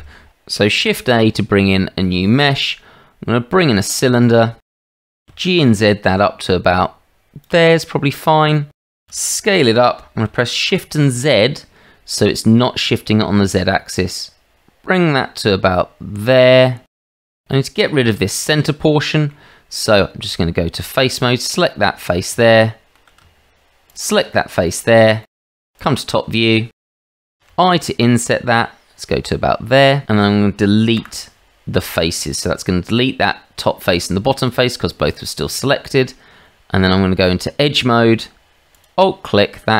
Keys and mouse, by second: 0.6 shift+middle click, 0.8 shift+a, 5.0 g, 9.0 s, 17.0-17.4 middle drag, 18.0-19.3 middle drag, 20.1 Tab, 21.7 middle click, 22.4 shift+middle click, 23.8 shift+middle click, 24.7 middle click, 25.2 shift+middle click, 25.8 click, 26.8 click, 27.2 shift+middle click, 27.5 i, 30.9 Delete, 33.0 middle click, 33.9 shift+middle click, 36.8 Tab, 38.8 alt+click.